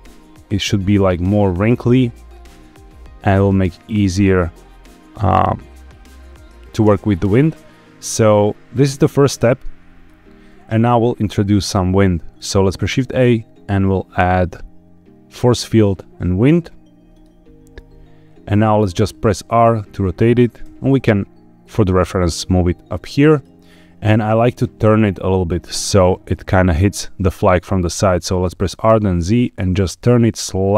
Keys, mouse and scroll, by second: 6.8 space, 9.1-10.0 drag, 11.6-12.3 shift+middle drag, 12.5 shift+a, 18.9 r, 20.1 click, 20.5 g, 23.5 click, 28.6 r, 28.9 z.